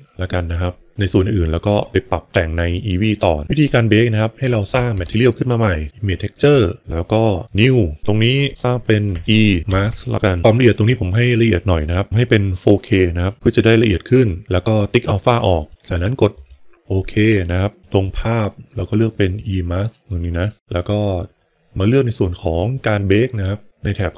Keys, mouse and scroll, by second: 3.4 middle click, 4.3 click, 4.8 shift+a, 7.4-16.5 drag, 9.2 BackSpace, 17.8 click, 22.5-23.1 drag.